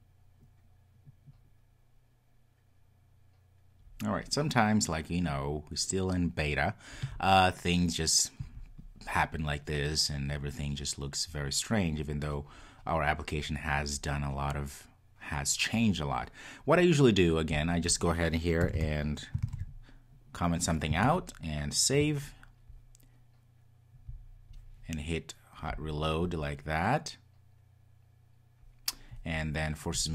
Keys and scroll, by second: 19.5 super+s, 25.9 super+\, 30.0 ctrl+r.